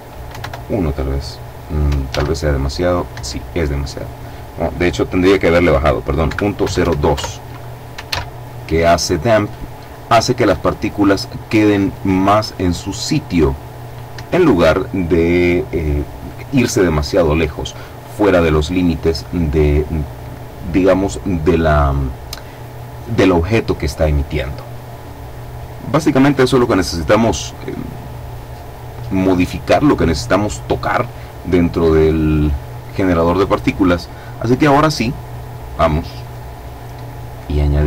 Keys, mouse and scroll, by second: 1.7 alt+a, 2.7 Escape, 3.5 click, 5.8 KP_Decimal, 6.2 KP_0, 6.4 KP_2, 6.7 KP_Enter, 7.7 alt+a, 13.7 Escape, 25.3-26.5 scroll up 2, 26.5-27.7 scroll down 3, 35.7 click, 37.7 click.